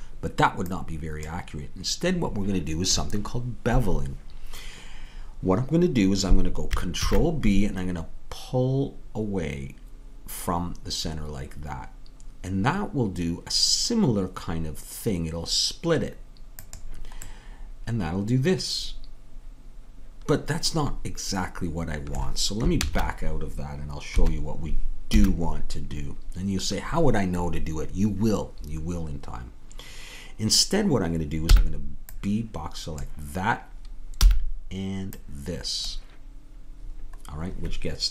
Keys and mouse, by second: 7.0 ctrl+b, 17.3-19.3 middle drag, 22.8 ctrl+z, 24.1 KP_3, 25.2 a, 31.5 b, 34.3 b.